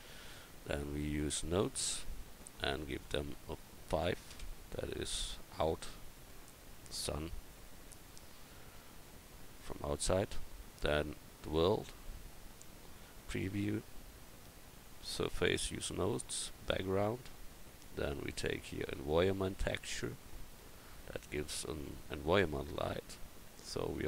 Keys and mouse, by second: 13.2-17.1 drag, 17.7-19.8 drag, 23.8 click.